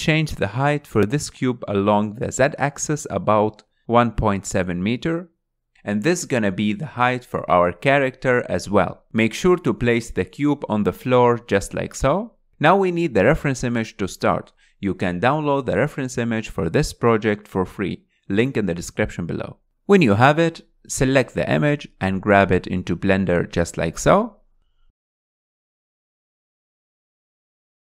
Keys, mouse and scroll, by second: 4.7-6.7 drag, 7.4 g, 12.5-22.0 drag, 22.0 scroll down 4.